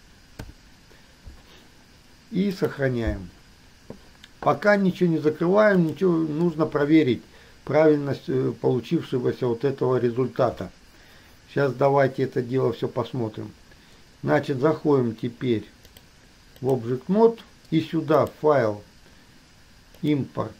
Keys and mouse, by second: 12.7-15.4 drag, 16.2 click, 18.4-20.5 drag.